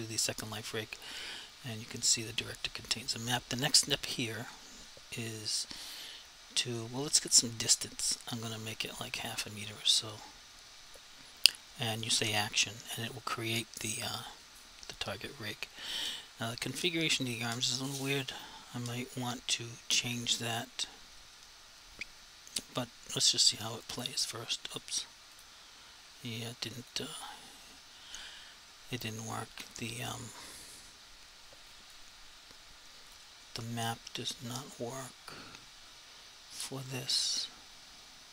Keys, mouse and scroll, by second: 7.5 click, 12.3 click, 23.8 click, 30.1 click, 33.1 click.